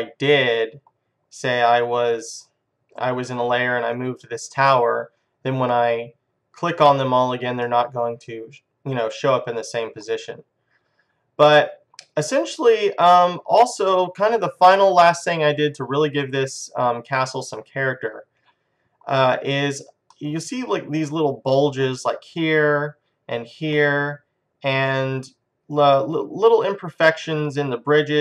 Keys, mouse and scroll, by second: 7.9-13.5 middle drag, 13.8-15.8 middle drag, 20.4-22.2 middle drag, 24.3 middle click, 25.4-26.4 middle drag, 27.8 middle click.